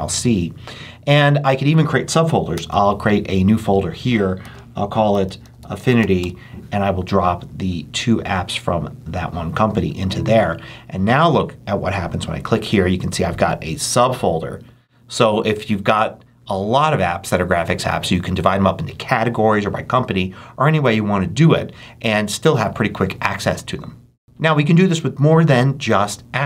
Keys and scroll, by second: 2.4 shift+super+n, 4.3-6.4 typing.